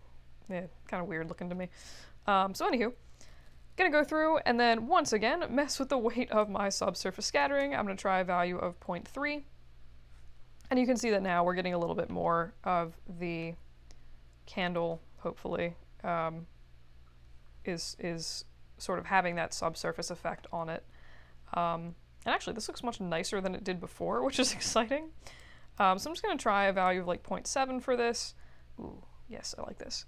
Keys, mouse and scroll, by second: 0.5-1.4 scroll down 2, 0.9 middle click, 1.4-1.7 scroll down 1, 6.4-7.7 drag, 25.3 click, 26.6 7, 26.8 Return.